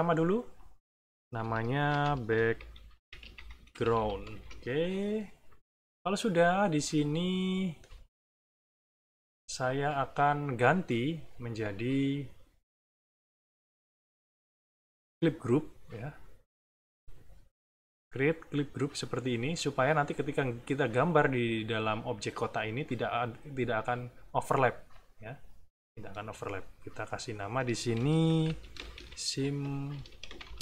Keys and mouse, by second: 0.5 click, 1.5-4.4 typing, 6.9-7.9 drag, 16.6-19.0 right drag, 18.5 click, 26.7 click, 27.3 click, 28.0-30.6 typing.